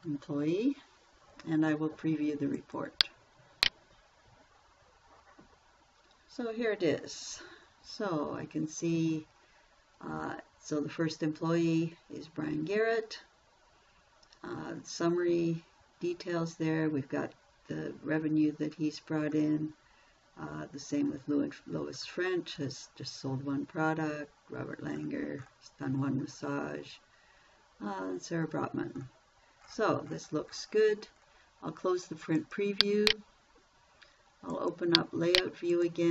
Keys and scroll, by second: 0.0-0.7 typing.